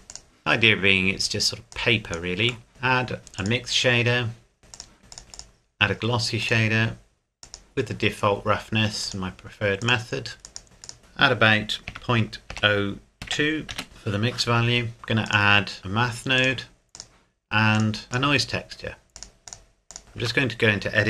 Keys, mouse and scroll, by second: 2.7 click, 8.1-9.0 scroll down 1, 9.0 click, 12.5 KP_0, 13.2 KP_2, 13.7 KP_Enter, 14.9-15.3 scroll down 1, 15.3 click, 19.2 click, 19.4 shift+middle click, 19.5 click, 20.2 Tab.